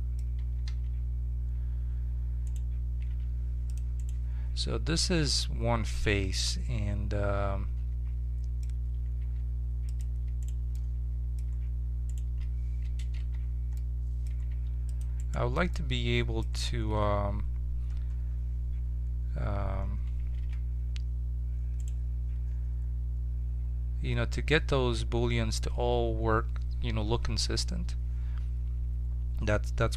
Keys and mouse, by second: 0.7 z, 2.4-3.7 right drag, 3.0 ctrl+Tab, 4.9-6.4 middle drag, 9.2 ctrl+Tab, 10.7-13.9 right drag, 13.1 j, 14.4 ctrl+Tab, 14.9 middle click, 15.1-17.2 right drag, 17.2 middle click, 20.3 ctrl+r, 23.5 middle click.